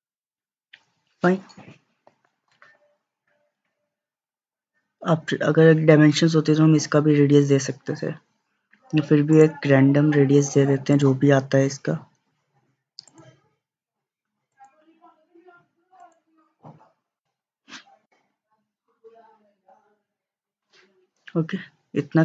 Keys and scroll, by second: 18.4 Escape.